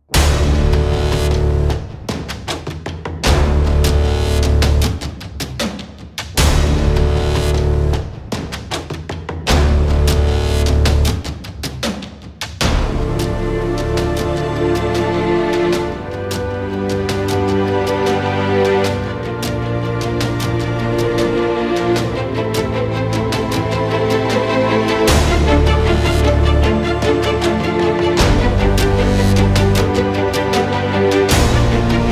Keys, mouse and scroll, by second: 1.6 alt+click, 1.9-3.0 alt+right drag, 3.0-3.4 alt+middle drag, 3.4-4.0 alt+right drag, 4.0 alt+middle click, 4.1 alt+right click, 4.4 alt+click, 4.5 alt+middle click, 4.7-5.2 alt+right drag, 5.2-6.6 drag, 6.7 scroll down 1, 7.0 alt+click, 7.3 alt+right click, 7.5-8.2 alt+middle drag, 8.2 alt+right click, 8.5-9.5 alt+drag, 9.9 click, 10.2 KP_Decimal, 10.4 alt+click, 10.7 middle click, 10.8 r, 13.1-14.3 middle drag, 14.8-15.5 alt+right drag, 15.5-16.3 alt+middle drag, 16.3 click, 16.6 scroll up 8, 16.8-19.0 drag, 19.0 KP_0, 19.4 click, 19.7 KP_0, 20.3 alt+middle click, 20.4 alt+right click, 20.7 alt+middle click, 21.4-22.4 drag, 22.9 click, 23.8 alt+right click, 24.5-25.5 drag, 25.5 KP_0, 25.9 click, 26.6 KP_0, 26.8 alt+right click, 27.3 alt+middle click, 27.6 alt+click, 27.8-29.6 alt+middle drag, 29.8 click, 30.5 KP_0, 31.2-32.1 middle drag.